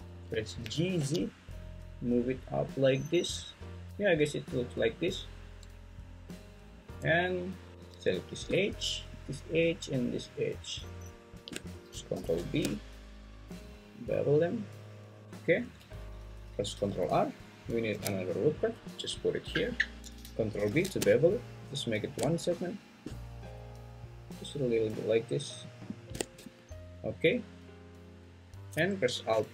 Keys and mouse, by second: 0.6 g, 1.0 z, 7.7 2, 12.1 ctrl+b, 15.2 alt+z, 15.8 `, 17.9 ctrl+r, 20.0 Escape, 20.6 ctrl+b.